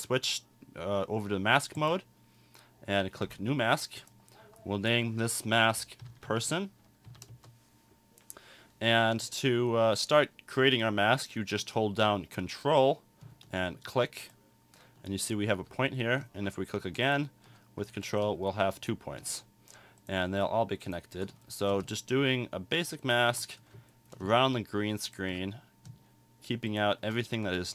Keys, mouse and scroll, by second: 1.8 click, 3.2 click.